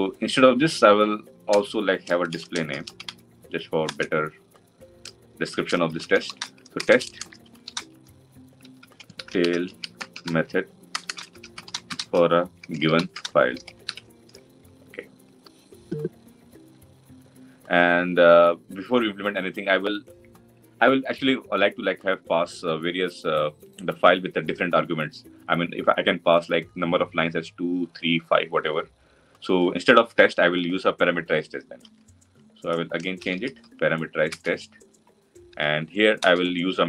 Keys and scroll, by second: 3.7 Return, 34.2 Return.